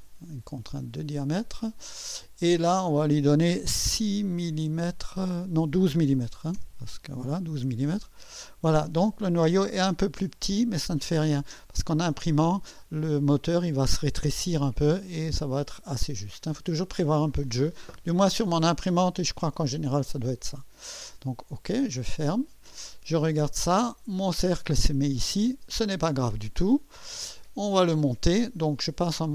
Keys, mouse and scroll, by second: 0.7 click, 6.0-7.0 typing, 7.9 click, 8.7 scroll up 1, 10.7 scroll up 1, 16.1-16.5 scroll down 1, 21.9 click, 23.4-24.1 drag, 25.2 1, 25.2 1.